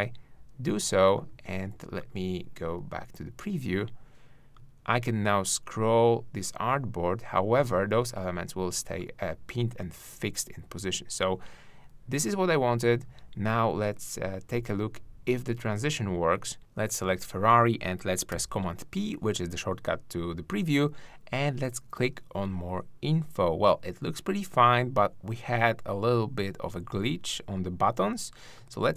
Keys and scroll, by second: 18.3 super+p.